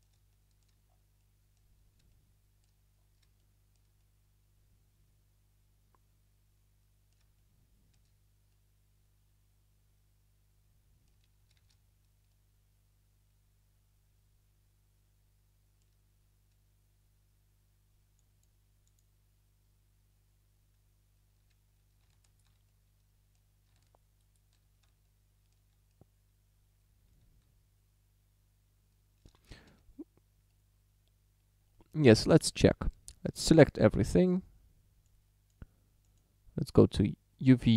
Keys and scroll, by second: 11.7 shift+d, 29.5 shift+d, 29.7 a, 33.3 a.